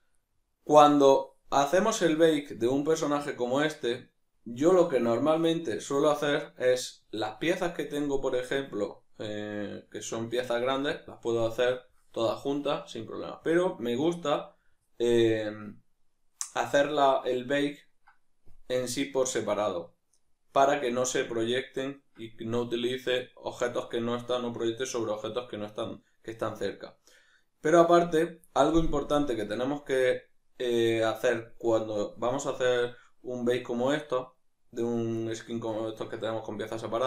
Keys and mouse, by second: 6.5 right click, 9.6-11.6 middle drag, 11.6-37.0 right drag.